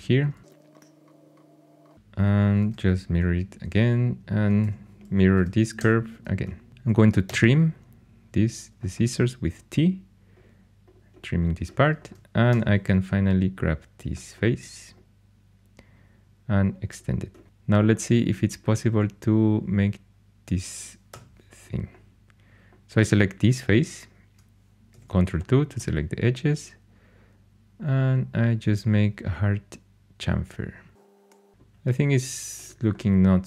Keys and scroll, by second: 0.4 ctrl+super+c, 2.6 alt+x, 2.7 alt+x, 4.6 2, 5.3 alt+x, 5.7 alt+x, 7.2 t.